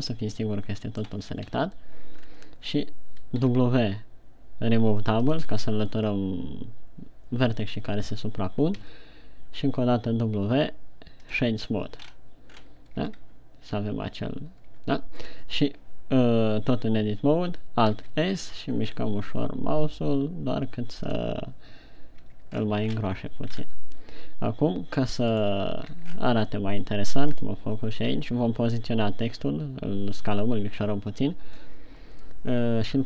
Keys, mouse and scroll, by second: 0.6 middle click, 1.7 scroll up 1, 2.1 KP_1, 2.8 scroll down 2, 3.9 w, 9.4 w, 12.5-13.1 scroll up 4, 13.1-13.4 scroll down 4, 13.4 Tab, 15.3 Tab, 18.5 alt+s, 21.6 click, 22.9 Tab, 22.9-23.3 scroll down 3, 23.4-24.1 shift+scroll up 4, 25.7 right click, 26.5-27.1 scroll down 4.